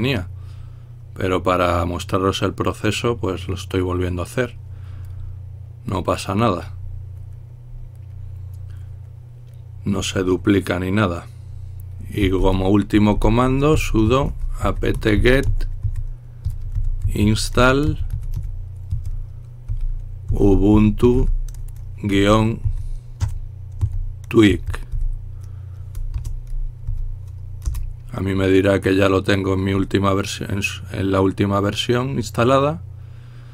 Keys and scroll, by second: 12.2-25.0 typing, 26.1-28.9 typing.